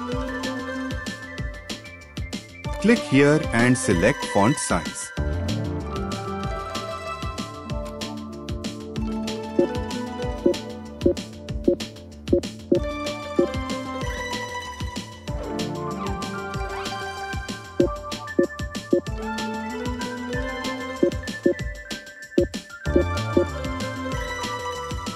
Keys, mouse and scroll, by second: 8.6 b, 10.2-13.2 typing, 16.2 Return, 17.6 b, 18.0 o, 18.3 o, 18.6 k, 20.0 space, 21.2 o, 22.1 v, 22.6 e, 23.0 r.